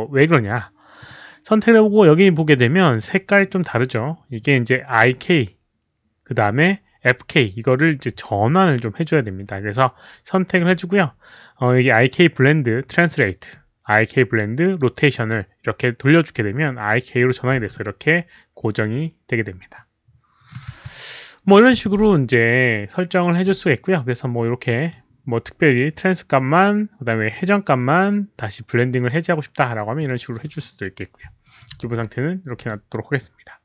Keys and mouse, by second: 0.1-0.9 typing, 0.4 middle click, 0.4 click, 0.9 click, 2.1-2.8 typing, 2.3 click, 2.3 middle click, 5.3-6.0 typing, 5.5 middle click, 8.0 click, 8.8 click, 8.8 z, 10.5 click, 13.0-13.5 drag, 14.7 click, 17.1 click, 17.7-20.4 middle drag, 17.7 w, 21.1-21.9 typing, 21.4 middle click, 21.4 click, 23.1-25.1 typing, 23.4 click, 23.4 middle click, 24.6 drag, 24.6 middle click, 27.3-27.6 drag, 27.4-28.4 typing, 27.6 middle click, 29.9 click, 30.0 z, 30.3 click, 31.4 alt+click, 32.5 alt+click, 32.5 q.